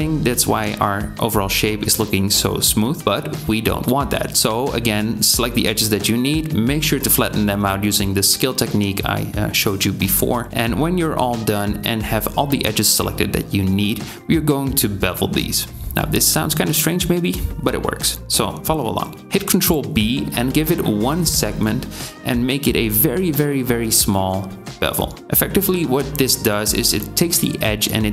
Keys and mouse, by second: 1.2 s, 7.0 click, 9.5 s, 10.5 ctrl+alt+shift+z, 10.7 alt+shift+click, 14.9 ctrl+click, 18.6 ctrl+b.